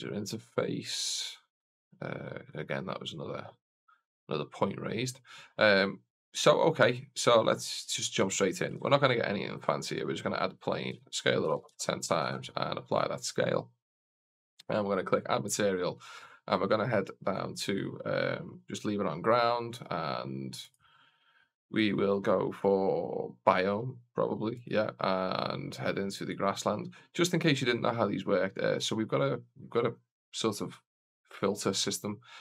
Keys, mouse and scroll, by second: 1.5 click, 8.6 shift+a, 10.8 s, 12.0 ctrl+a, 13.7 right click, 14.4 click, 16.8 click, 19.6 click, 22.0 click, 24.4-26.5 drag, 28.6-32.4 drag.